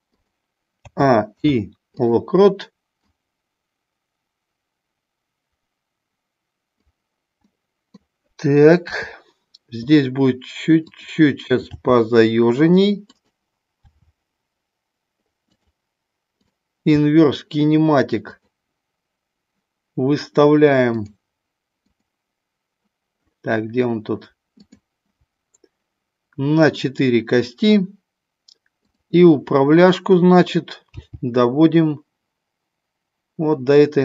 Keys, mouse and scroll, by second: 0.2 click, 0.8 a, 1.3 i, 2.9-6.8 drag, 7.4 middle click, 8.8 KP_3, 11.7 g, 13.2 click, 13.9 r, 15.4 click, 16.3 click, 18.2-19.4 drag, 21.8 click, 24.6 click, 26.7 click, 31.1 g.